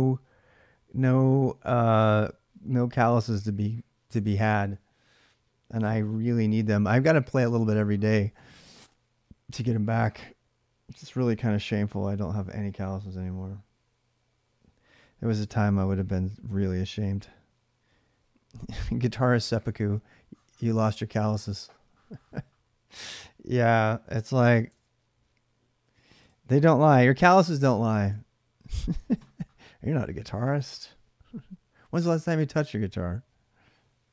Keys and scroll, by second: 24.5 super+Tab, 26.7 ctrl+c, 27.8 alt+Tab.